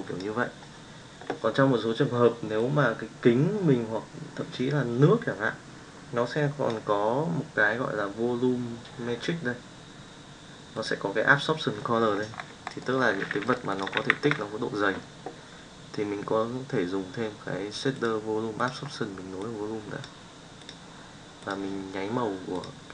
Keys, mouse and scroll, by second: 0.0 click, 13.4 middle click, 13.7 click, 13.9 shift+a, 19.5-20.2 drag, 20.5 click.